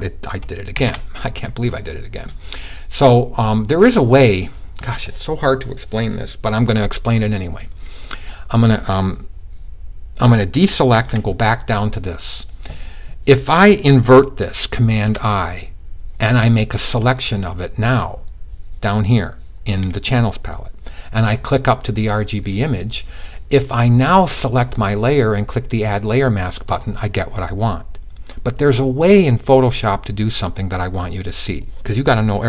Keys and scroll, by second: 0.2 super+z, 10.4 super+d, 14.6 super+i.